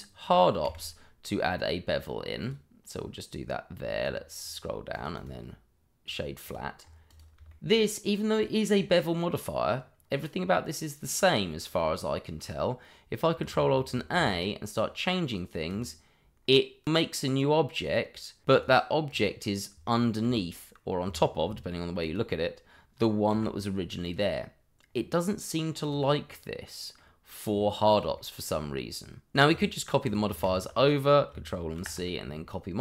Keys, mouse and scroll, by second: 0.6 q, 2.4 click, 4.0-4.9 scroll down 1, 4.9 click, 5.1 right click, 6.0 click, 6.5 double click, 6.8 scroll up 1, 7.0 click, 7.5 shift+middle click, 7.5 middle click, 8.3 click, 13.9 ctrl+alt+a, 14.7 click, 18.4 click, 18.6 double click, 19.1 click, 20.2 g, 21.0 Escape, 22.0 click, 23.3 g, 24.0 click, 24.8-25.3 scroll down 1, 25.3 middle click, 25.8 click, 26.3 middle click, 27.4 scroll up 1, 28.1 shift+middle click, 29.3 click, 30.4 click, 31.7 ctrl+c.